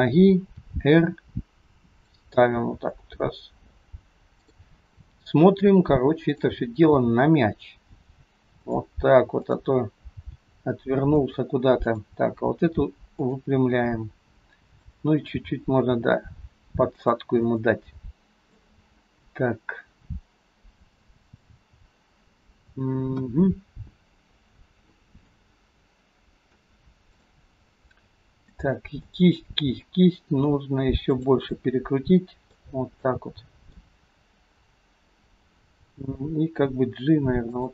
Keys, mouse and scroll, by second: 0.6 r, 2.6 g, 6.3 click, 7.0 g, 9.4 click, 10.4 g, 11.9 click, 12.5 g, 14.7 click, 15.4 g, 17.4 scroll up 1, 17.6 middle click, 23.3 KP_1, 25.4 middle click, 27.1 click, 27.9 middle click, 29.0 middle click, 30.5 r, 31.7 middle click, 33.0 scroll up 1, 33.1 middle click, 34.4-36.0 scroll down 2, 36.0 g.